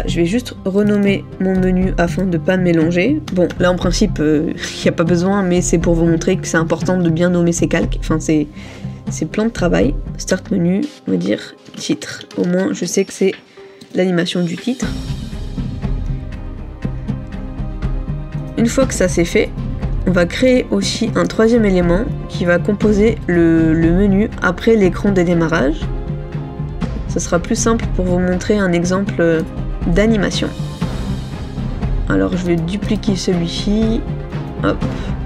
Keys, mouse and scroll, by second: 1.0 double click, 3.6 BackSpace, 4.0 BackSpace, 7.1 typing, 20.1-20.5 scroll down 1, 29.5 middle click, 33.0 right click.